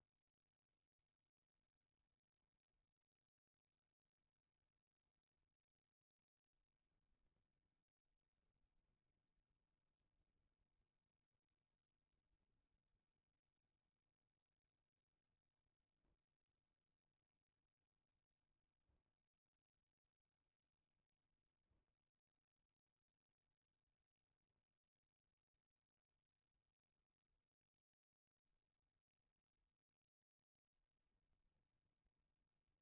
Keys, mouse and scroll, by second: 3.2 click, 3.4 click, 5.4 click, 8.2 click, 28.7-31.5 middle drag.